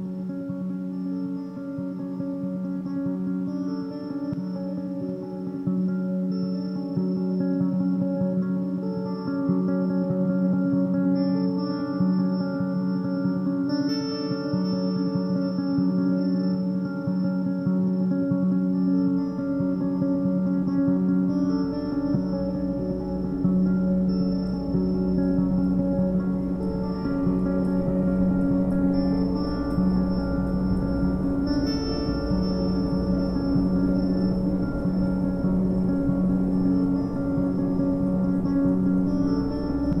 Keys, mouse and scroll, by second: 0.7 ctrl+a, 2.1 shift+s, 4.1 Tab, 4.9-7.8 right drag, 7.8 Tab, 8.2 a, 8.9 alt+s, 11.2 Tab, 11.6-14.4 middle drag, 14.4 ctrl+3, 14.9-15.4 middle drag, 15.4-15.7 scroll up 1, 15.7-16.1 shift+middle drag, 16.1 scroll up 1, 16.3 Tab, 16.8 2, 17.1 click, 17.3 click, 17.9 ctrl+x, 18.5 a, 18.7 a, 19.4 Tab, 19.6-20.0 scroll down 1, 20.0 Tab, 20.5 2, 20.8 click, 20.9 click, 21.3 click, 21.5 click, 21.9 f, 22.2 a, 22.4 a, 22.5 scroll down 1, 22.7 Tab, 23.1 middle click, 23.5 scroll up 3, 23.6 Tab, 24.1 3, 24.4 click, 25.2 s, 26.4 a, 26.6 a, 27.2 2, 27.4 click, 27.9 s, 29.0 a, 29.2 a, 29.4 Tab, 29.7-30.0 middle drag, 30.0-30.9 scroll down 3, 30.2 a, 30.4 a, 30.9-31.3 shift+middle drag, 31.3-32.0 scroll up 2, 32.0-32.6 scroll up 1, 32.6-33.7 middle drag, 33.7-34.1 scroll up 4, 34.6-35.3 shift+middle drag, 35.3-35.7 scroll down 7, 36.8 KP_7, 37.5 scroll down 4, 37.9-39.7 shift+middle drag, 39.7-40.0 scroll up 1.